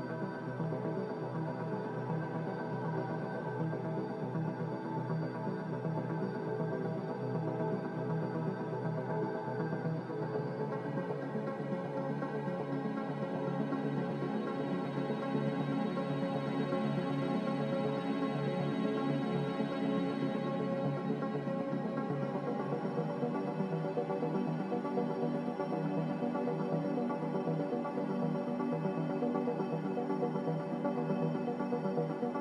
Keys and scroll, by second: 5.4 z, 8.5 typing, 8.8 Return, 14.0 2, 14.2 Return, 14.2 0, 17.4 typing, 17.6 Return, 21.7 ctrl+z, 26.3 1, 26.4 0, 26.6 Return, 28.8 typing, 30.7 Return.